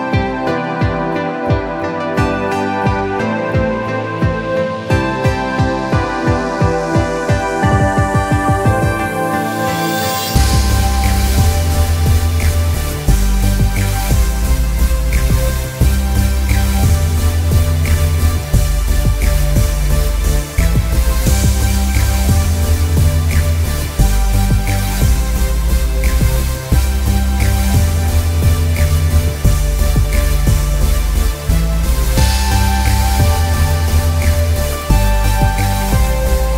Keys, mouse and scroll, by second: 1.2 space, 1.3 click, 1.6 space, 3.4 click, 25.7 scroll down 1, 27.3 alt+scroll down 1, 27.9 space, 28.1 click, 28.4 space, 34.1 click.